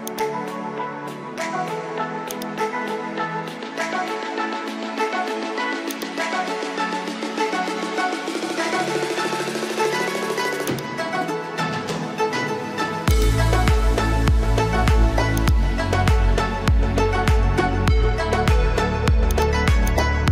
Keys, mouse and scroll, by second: 2.9 alt+scroll down 1, 3.6 alt+scroll up 1, 6.0-7.5 alt+drag, 10.7-12.8 shift+drag, 13.2-14.9 drag, 15.3 shift+click, 17.3 alt+scroll up 1, 19.3 ctrl+click, 19.9-20.3 drag.